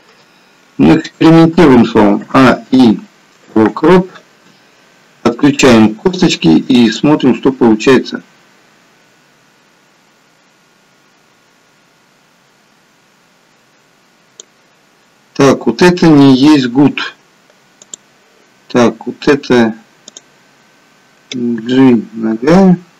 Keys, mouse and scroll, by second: 2.1 a, 2.3 i, 5.8 click, 7.1 click, 17.7 click, 20.0 click, 21.6 g.